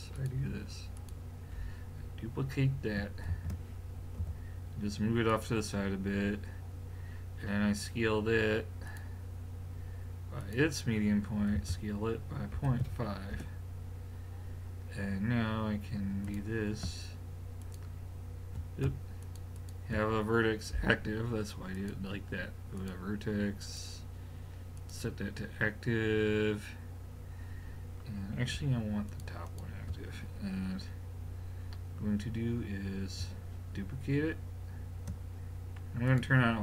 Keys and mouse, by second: 0.2-2.8 drag, 3.3 shift+d, 8.9 click, 11.6 s, 16.3-21.5 drag, 21.7-25.5 drag, 29.1 click, 36.1 click.